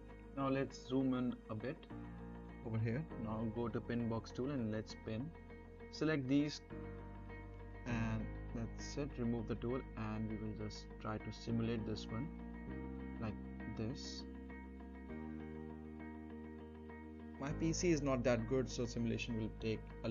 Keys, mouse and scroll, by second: 0.0 scroll up 1, 0.3 middle click, 0.6-2.0 scroll down 1, 2.0 middle click, 3.2-7.2 drag, 9.1-11.1 scroll up 1, 11.1-11.7 middle click, 11.7-12.4 scroll up 1, 12.4 space.